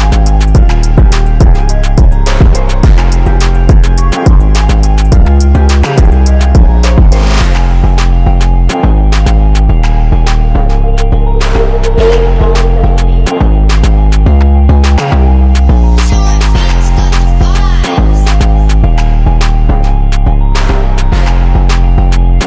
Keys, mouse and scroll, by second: 0.5 ctrl+t, 0.9 shift+click, 6.0-6.4 scroll up 1, 6.5-9.1 drag, 10.3 click, 12.0 typing, 12.3-13.4 drag, 13.8-14.7 typing, 14.0 click, 14.8 click, 19.1 ctrl+z, 19.5 click, 21.3-21.7 typing, 21.5 click, 22.2 ctrl+z.